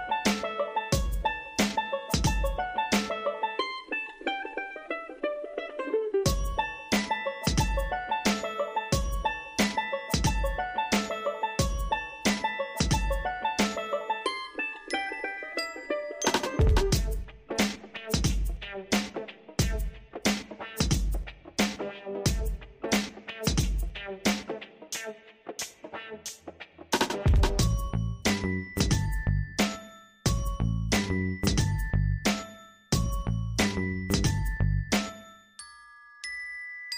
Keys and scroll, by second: 19.1 ctrl+l.